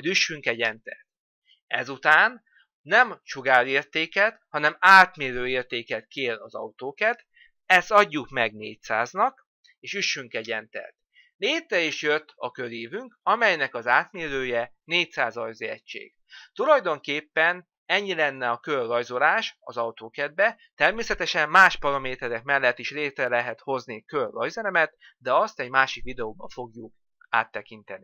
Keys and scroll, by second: 0.4 Return, 10.0 Return.